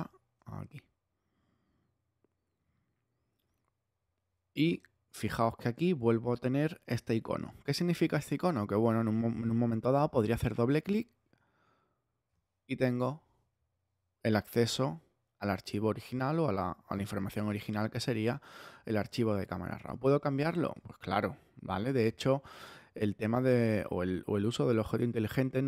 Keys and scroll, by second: 22.0 super+z.